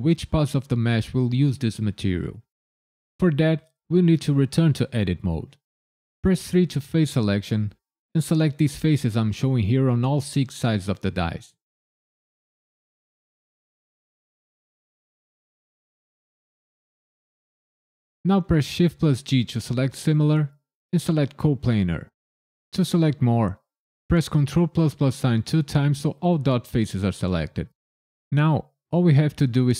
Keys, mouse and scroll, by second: 4.9 Tab, 6.5 3, 7.9 click, 8.6 middle click, 9.9 shift+click, 10.6 middle click, 11.8 shift+click, 12.5 middle click, 13.5 shift+click, 14.2 middle click, 15.6 shift+click, 16.3 middle click, 16.3 middle click, 17.8 shift+click, 18.8 shift+g, 25.0 ctrl+KP_Add, 25.7 ctrl+KP_Add.